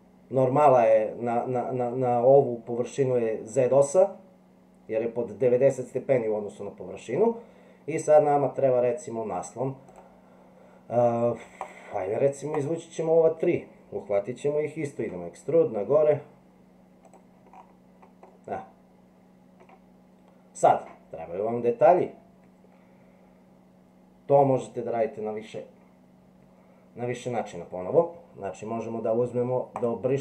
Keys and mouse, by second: 1.7 middle click, 8.2 middle click, 9.9 right click, 11.6 shift+click, 12.5 shift+click, 15.0 e, 18.4-19.7 middle drag.